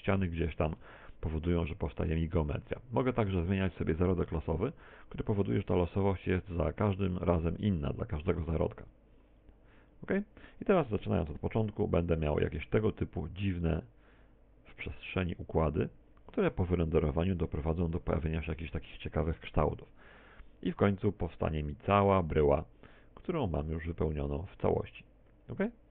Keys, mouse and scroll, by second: 0.8 Tab, 1.1 middle click, 1.8 Tab, 5.4 click, 6.8 click, 7.8 click, 8.6 click, 9.2 click, 9.8 click, 10.2 click, 10.8 click, 12.2 click, 20.2 Escape, 21.4 click.